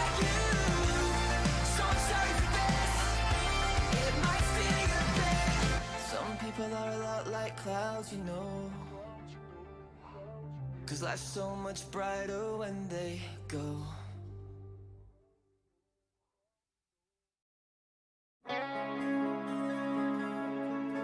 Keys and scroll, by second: 7.6-8.7 typing, 13.6 e, 16.3 d, 16.9 s, 17.2 a.